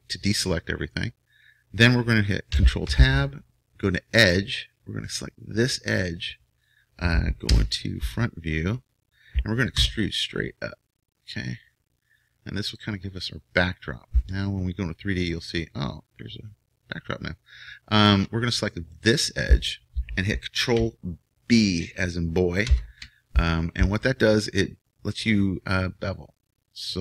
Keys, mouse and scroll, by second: 2.8 ctrl+Tab, 5.0-7.5 drag, 7.5 KP_1, 9.9 e, 14.2 click, 14.4-16.1 middle drag, 18.9-22.7 right drag, 22.7 ctrl+b.